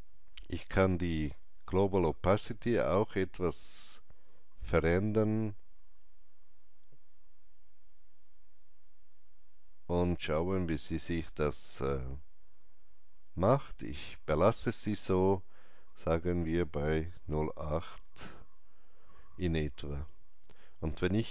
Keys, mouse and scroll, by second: 1.7 KP_Enter, 1.7-17.2 alt+drag, 17.2 KP_8, 17.9 Return.